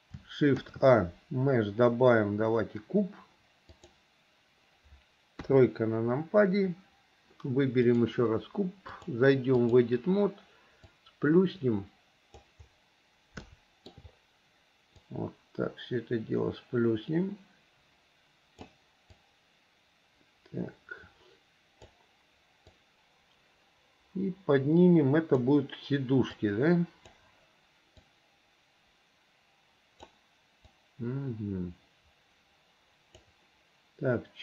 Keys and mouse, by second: 0.7 shift+a, 5.5 KP_3, 8.1 click, 9.2 click, 11.2-12.5 drag, 13.6 shift+middle click, 15.3-18.9 drag, 19.4-22.0 drag, 23.0-25.6 drag, 26.6 click, 28.1-30.2 drag, 30.9-33.4 drag.